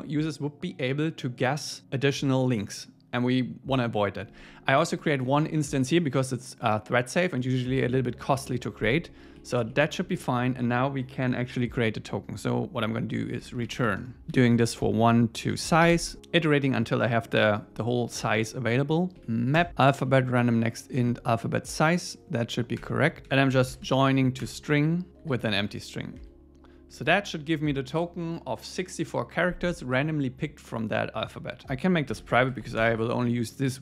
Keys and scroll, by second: 5.0 alt+shift+Left, 5.6 alt+shift+Left, 9.4 Down, 19.1 Down, 19.6 Return, 21.0 Tab, 22.8 Return, 24.4 Return, 25.1 super+Right, 26.2 BackSpace, 27.0 super+s, 31.6 super+Left.